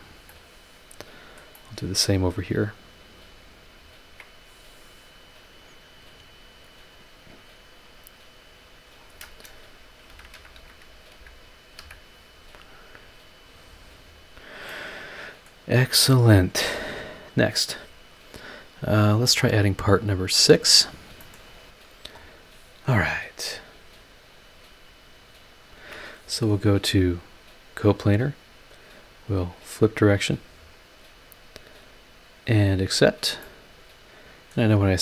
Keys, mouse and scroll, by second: 0.0 scroll down 1, 0.3-1.1 middle drag, 1.5 click, 2.2 scroll up 1, 3.2 click, 3.9 ctrl+click, 7.2 click, 8.6 click, 10.0-11.8 typing, 13.2 click, 14.0 scroll down 1, 14.6 scroll down 1, 14.7-15.6 middle drag, 17.7-18.1 scroll up 1, 21.2 click, 22.1 click, 22.7-23.4 scroll up 2, 24.3 click, 25.7 ctrl+click, 27.1 click, 29.2 click, 32.3 click, 32.9 scroll down 1, 33.4-34.7 middle drag.